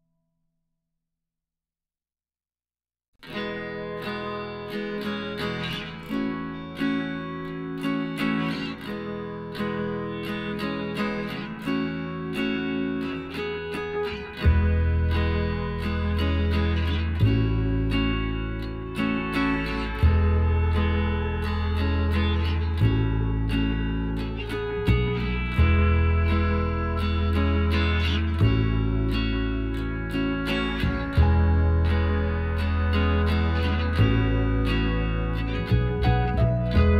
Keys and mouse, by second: 0.0-1.8 right drag, 1.1 b, 3.0 g, 6.0-7.3 drag, 6.9 z, 10.0 s, 12.1-13.9 drag, 14.8-16.4 right drag, 15.5 s, 17.6-19.4 right drag, 18.3 s, 20.2-22.0 right drag, 21.3-23.0 drag, 22.9 right click, 23.0-25.4 middle drag, 25.4-27.1 drag, 25.9-28.1 right drag, 27.5-29.3 drag, 28.9 Tab, 29.3-31.1 middle drag, 31.1 Tab, 31.4-32.6 middle drag, 32.6-34.4 right drag, 33.1-34.4 drag, 34.2 middle click, 35.1 KP_1, 36.4 KP_3.